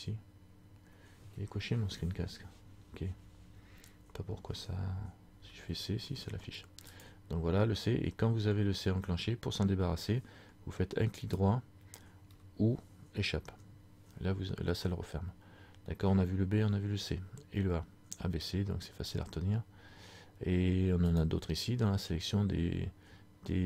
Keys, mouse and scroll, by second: 21.2 click.